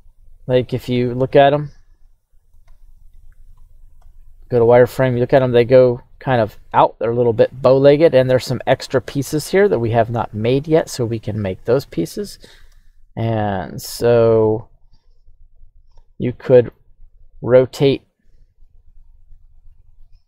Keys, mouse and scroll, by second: 0.9 x, 1.5 x, 2.1 right click, 2.6 x, 3.1 right click, 4.0 z, 12.7 z, 13.7-14.6 scroll up 1, 14.6 right click, 15.4 right click, 16.5 r, 19.3 right click.